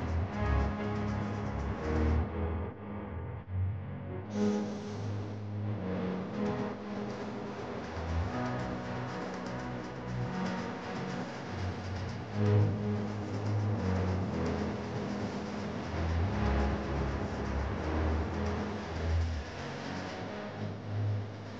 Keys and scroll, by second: 5.2 Down, 8.1 Up, 9.8 Up, 12.2 Down, 12.9 Up, 14.3 Down.